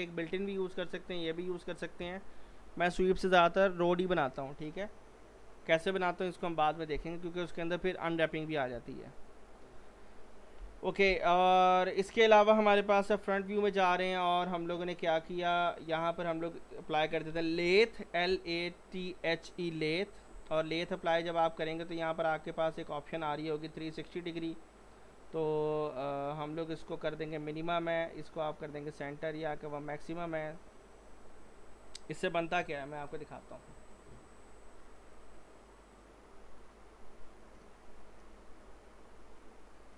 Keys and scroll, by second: 10.6 Delete, 13.0-13.3 typing, 17.1-17.8 typing, 32.6-33.0 typing, 38.4-39.2 typing.